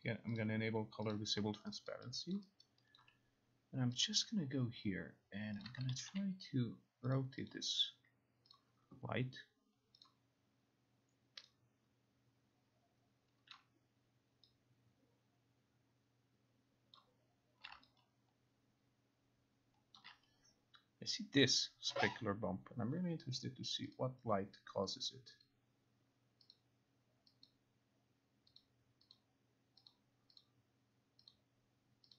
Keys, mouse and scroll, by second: 0.4 click, 1.2 click, 2.0 alt+right click, 2.4 alt+click, 4.1 click, 5.7 click, 6.2 r, 7.2 click, 7.6 click, 8.7 click, 10.1-13.3 drag, 13.7 click, 17.1 click, 20.1 alt+click, 23.5 click, 24.0 click, 25.1 click, 25.5 click, 26.7 click, 27.5 click, 28.7 click, 29.3 click, 30.0 click, 30.5 click, 31.4 click.